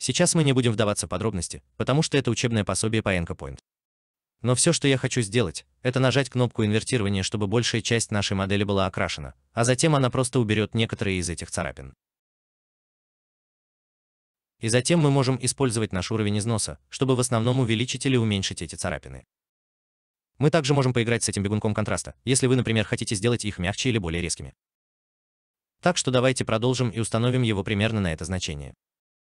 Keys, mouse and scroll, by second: 8.0 alt+right click.